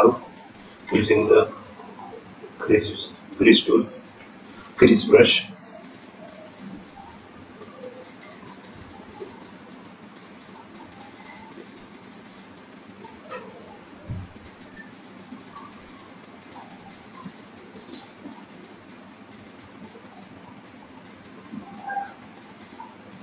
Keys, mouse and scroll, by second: 0.5 scroll down 1, 0.7 middle click, 1.3 scroll down 4, 1.5 middle click, 2.6 click, 3.1-3.7 scroll up 5, 4.4-5.7 scroll up 2, 5.7 scroll up 1, 5.9 click, 6.3 click, 7.5 click, 14.0 shift+click, 19.1 click, 19.6 click, 20.1 click, 20.6 click, 21.1 click, 21.5 click, 22.0 click, 22.7 shift+click.